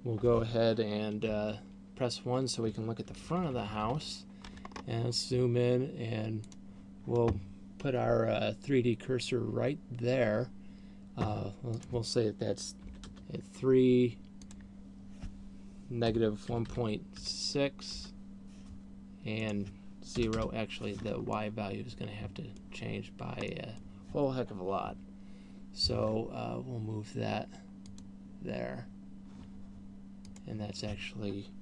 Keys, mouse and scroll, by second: 1.6 KP_1, 3.6 ctrl+KP_6, 4.4 ctrl+KP_6, 5.4-5.8 scroll up 6, 6.9 click, 12.4 click, 15.1 click, 19.9 click, 21.6 middle click, 24.1 middle click, 25.4 KP_7, 28.4 click, 30.4 click.